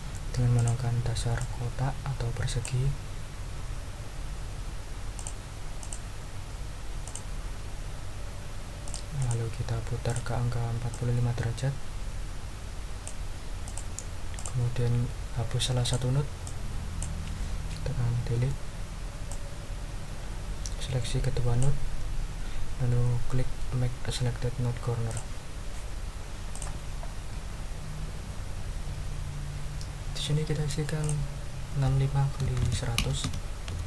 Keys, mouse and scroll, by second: 0.5 click, 1.4-2.8 ctrl+drag, 5.2 click, 5.8 click, 7.0 click, 8.8 click, 9.2 click, 10.1 ctrl+click, 10.9-13.2 ctrl+drag, 13.6 click, 14.3 click, 15.8 click, 16.4 click, 18.3 Delete, 19.3-21.8 drag, 25.1 click, 26.5 click, 31.0 ctrl+click, 31.7 ctrl+a, 32.2-33.7 typing.